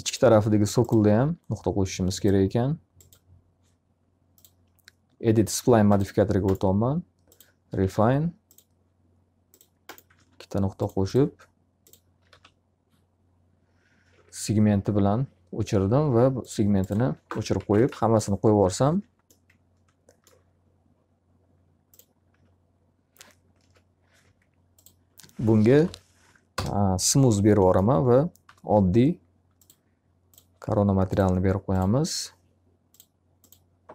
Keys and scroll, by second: 7.4 s, 10.1 alt+a, 12.3 alt+r, 16.9 x, 17.6 z, 17.8 alt+a, 18.6 q, 18.9 F3, 22.3 d, 23.6 ctrl+z, 25.7 m, 26.5 Return, 28.5 m.